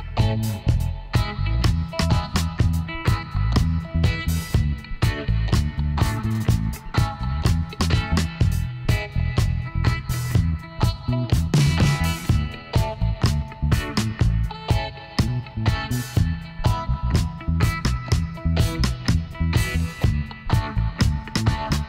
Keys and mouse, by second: 2.8-4.6 drag, 7.3 KP_1, 9.8-11.6 middle drag, 11.1 Tab, 12.8-14.3 drag, 14.3-19.5 middle drag, 19.5-21.3 drag, 21.3 middle click.